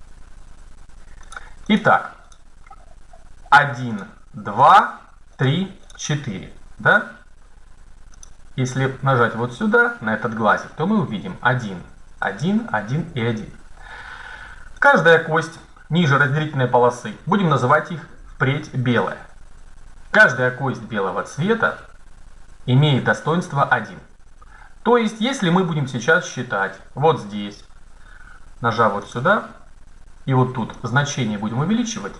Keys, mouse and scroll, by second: 1.1 right click, 6.4-7.5 right drag, 8.3-9.9 drag, 14.8-16.8 right drag, 28.9 click, 31.2-32.1 drag.